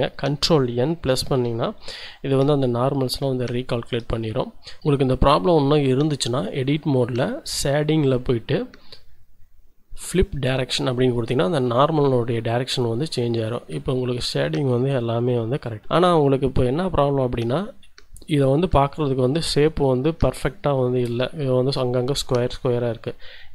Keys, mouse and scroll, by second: 1.4 ctrl+n, 2.4 Tab, 3.3-4.8 shift+middle drag, 4.8 Tab, 8.0 click, 10.1 click, 11.1-12.2 drag, 12.2 Tab, 12.7-13.7 drag, 13.8 shift+click, 15.1 click, 17.2 click.